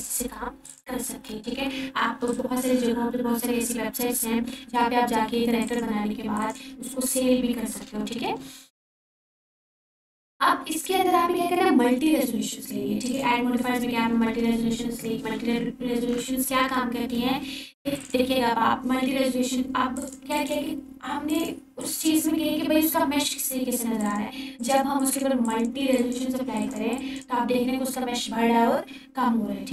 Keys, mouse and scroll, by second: 2.7-3.4 scroll up 1, 3.4-4.1 alt+shift+drag, 9.6 ctrl+4, 14.2 click, 17.4 ctrl+4, 19.1 click, 25.2 click.